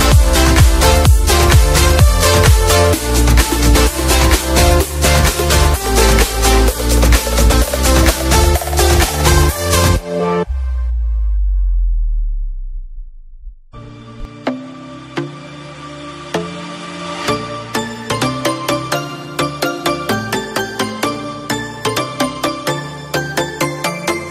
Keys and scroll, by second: 0.9 z, 1.7 F3, 1.9 F2, 2.3 b, 9.2 F2, 19.3 Page_Down, 20.3 ctrl+d, 23.6 Page_Down.